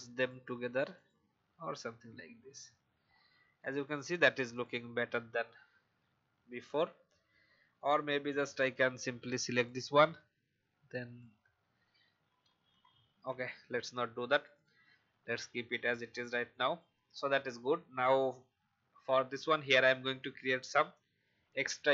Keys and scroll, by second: 3.5 alt+v, 8.8 a, 12.4 ctrl+z, 13.0 v.